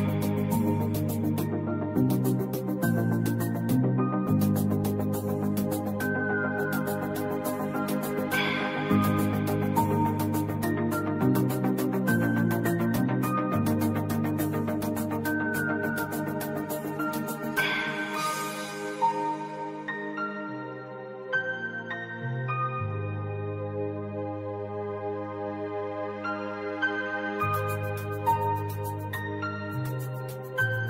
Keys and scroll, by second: 6.3 Delete, 8.0 ctrl+2, 16.1 i, 18.4 v, 20.1 ctrl+2, 26.4 v, 28.5 i, 28.9 v.